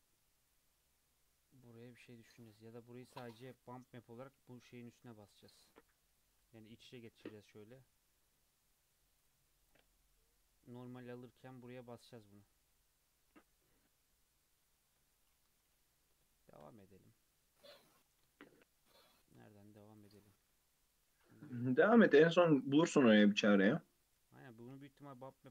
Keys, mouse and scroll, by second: 0.0 scroll up 1, 0.1 Tab, 0.5 click, 0.8-4.0 middle drag, 4.6 KP_3, 6.1 click, 6.9 g, 9.7 click, 9.9-10.8 middle drag, 10.8 scroll up 1, 12.0 scroll down 2, 12.2-14.7 middle drag, 14.7 scroll down 2, 15.5 KP_3, 16.3-16.7 shift+middle drag, 16.7-18.0 scroll up 1, 18.0 scroll down 3, 18.3-19.8 shift+middle drag, 19.8 click, 21.1 g, 22.6 click, 22.8 click, 23.6 click, 25.0-25.5 scroll up 2.